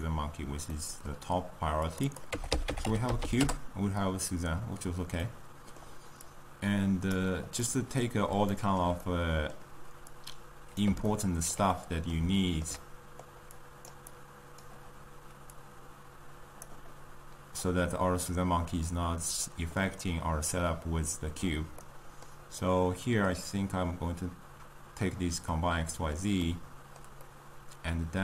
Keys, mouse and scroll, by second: 0.6-1.9 middle drag, 2.0-28.2 drag.